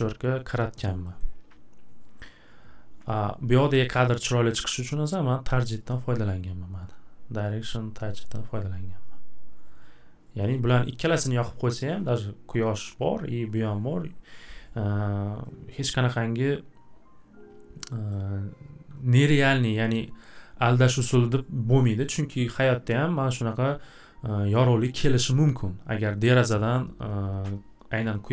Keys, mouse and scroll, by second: 1.2-3.1 scroll, 3.1 click, 5.9 click, 10.5 click, 11.0 click, 18.1 click, 22.1 right click, 22.7 right click.